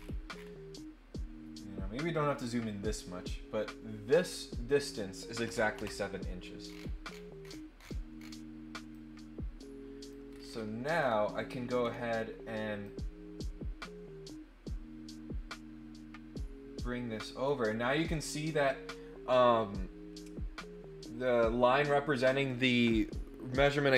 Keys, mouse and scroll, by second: 6.6-8.3 scroll down 5, 8.9-10.1 drag, 10.3-11.1 scroll up 3, 11.8 scroll down 1, 12.1 scroll up 1, 12.8-17.4 drag.